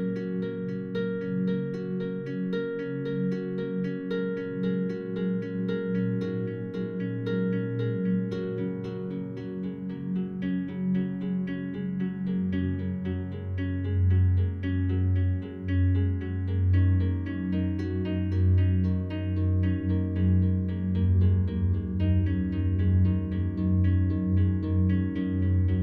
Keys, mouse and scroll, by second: 0.5 click, 1.0 click, 4.7 click, 5.3-6.4 drag, 7.1 click, 7.4 click, 8.5 -, 8.6 -, 8.8 -, 8.9 -, 10.0-12.0 drag, 12.6 shift+click, 13.2 shift+click, 13.8 shift+click, 14.8 click, 15.6 click, 16.7 click, 18.3 shift+click, 18.9 click, 19.2 click, 21.2 click, 21.9-23.5 drag, 24.1 click, 25.5 ctrl+click.